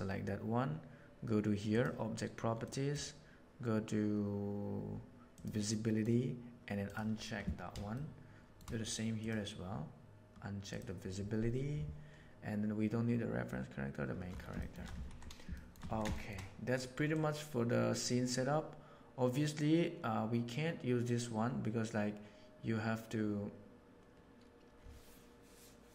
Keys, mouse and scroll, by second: 1.7 click, 2.7 middle click, 5.4 click, 5.4 right click, 5.7 middle click, 6.8 right click, 7.9-8.4 shift+middle drag, 9.2 click, 10.7 click, 14.6 shift+middle click, 14.8 a, 15.5 shift+middle click, 15.8 alt+a, 16.1 shift+middle click, 17.1-18.3 right drag, 18.3-25.9 drag.